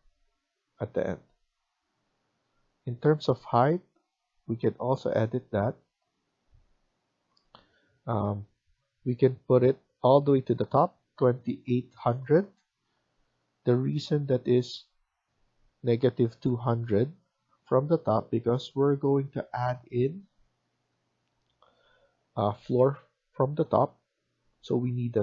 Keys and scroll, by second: 12.0-12.7 typing, 17.6 Escape.